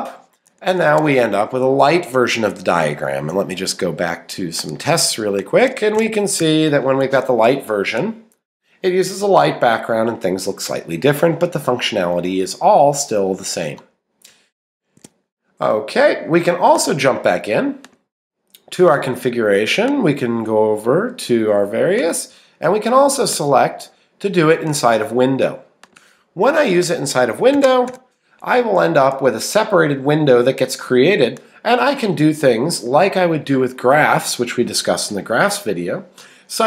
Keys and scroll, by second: 0.9 Escape, 12.2 Right, 15.0 ↺.